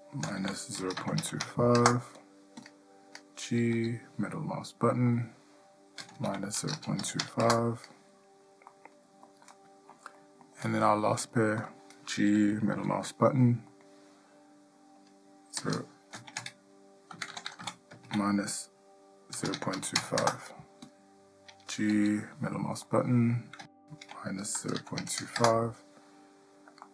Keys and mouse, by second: 3.9 g, 8.9-9.4 middle drag, 9.7-10.1 shift+middle drag, 10.4 middle drag, 11.8 click, 12.9 g, 22.1 g.